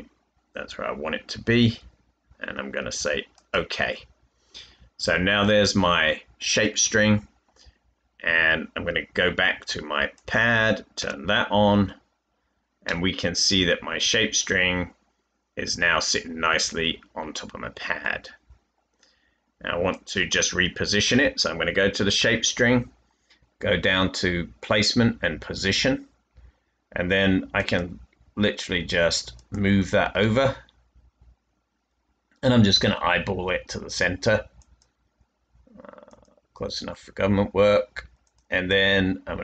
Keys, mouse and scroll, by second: 6.2 typing, 10.9-13.8 typing, 13.1 middle click, 15.4-18.0 middle drag, 15.7-16.9 typing, 19.6-20.4 typing.